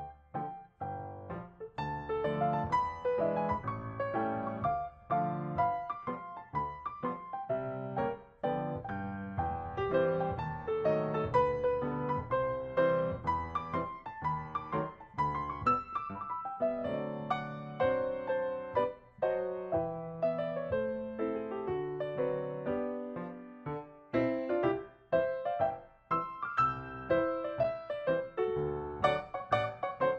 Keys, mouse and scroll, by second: 0.7 ctrl+d, 1.4 ctrl+click, 2.0 ctrl+click, 2.3 ctrl+d, 2.4 ctrl+click, 2.7 ctrl+shift+click, 2.8 ctrl+shift+click, 3.0 ctrl+shift+click, 3.4 ctrl+click, 3.5 ctrl+click, 3.8 s, 6.0-6.6 ctrl+scroll up 2, 6.6 ctrl+d, 6.9 ctrl+d, 7.1 ctrl+shift+click, 8.1 ctrl+shift+click, 8.7 ctrl+s, 9.2 ctrl+shift+click, 10.0 ctrl+shift+click, 12.3 ctrl+click, 14.7 shift+click, 14.9 s, 16.0 double click, 16.2 double click, 16.2 BackSpace, 16.8 Return, 17.6 ctrl+shift+click, 18.1 ctrl+click, 18.9-19.2 ctrl+scroll down 2, 19.0 space, 19.3 space, 22.4-22.8 ctrl+scroll up 2, 22.8 ctrl+shift+click, 23.0 ctrl+shift+click, 23.1 ctrl+shift+click, 23.8 ctrl+shift+click, 24.3 shift+click, 26.1 ctrl+scroll up 5, 26.5 ctrl+shift+click, 26.7 shift+click, 27.5 ctrl+shift+click, 28.0 ctrl+scroll down 6, 28.5 space, 28.6 ctrl+scroll up 3, 29.4 space.